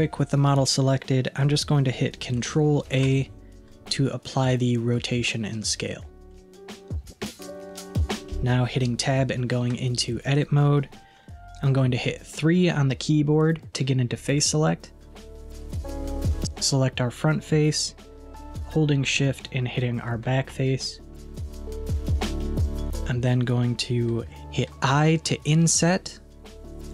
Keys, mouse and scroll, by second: 2.9 ctrl+a, 6.4-9.4 middle drag, 9.7 Tab, 11.4 3, 14.3-17.1 middle drag, 17.5-20.0 middle drag, 20.0 shift+click, 21.2-24.3 middle drag.